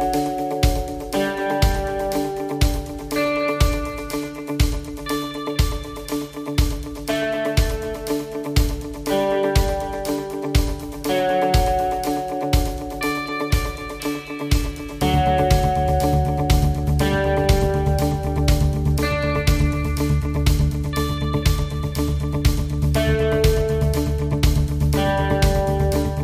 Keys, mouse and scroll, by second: 1.0 click, 4.4 click, 6.8 click, 18.2 click.